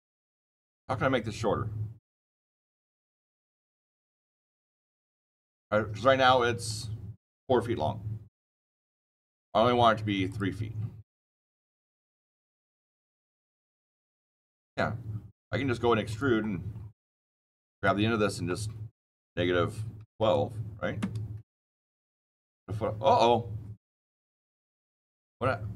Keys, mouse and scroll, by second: 2.2 click, 6.6 click, 8.9 click, 10.2 click, 16.0 click, 16.3-17.2 scroll down 21, 17.7 click, 18.9 KP_Subtract, 19.9 KP_1, 20.0 KP_2, 20.9 KP_Enter, 21.6 scroll down 10, 22.0-22.7 scroll up 25.